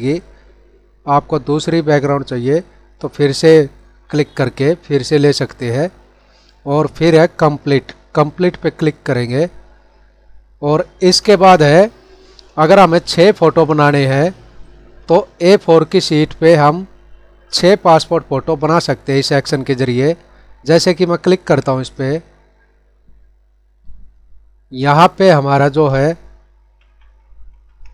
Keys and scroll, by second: 26.6 ctrl+-.